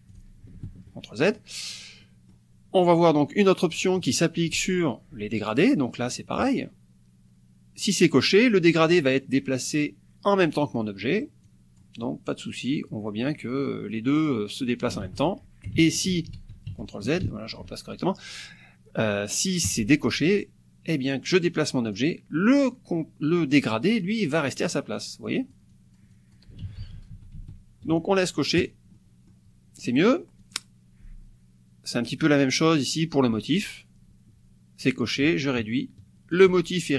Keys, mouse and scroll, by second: 0.1 click, 0.6 ctrl+z, 1.3 ctrl+click, 1.8 ctrl+click, 2.8 click, 6.1 click, 10.8 click, 12.5 click, 13.7 click, 14.3 click, 15.1 ctrl+z, 15.8 ctrl+z, 19.7 click, 20.4-22.1 drag, 24.7 click, 25.3-26.5 drag, 26.7 ctrl+z, 28.6 click, 29.0 click, 29.9 click, 30.4 click, 35.6 ctrl+shift+click.